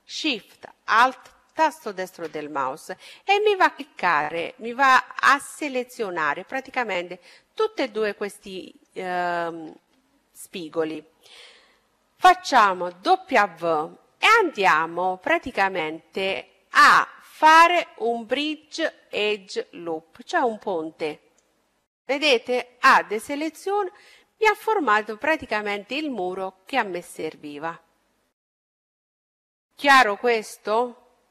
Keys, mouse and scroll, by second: 0.5-2.4 right drag, 1.8-5.8 middle drag, 8.6-10.3 middle drag, 12.2 w, 21.4-26.0 middle drag, 22.8 a, 26.6-28.5 middle drag, 28.6 middle click.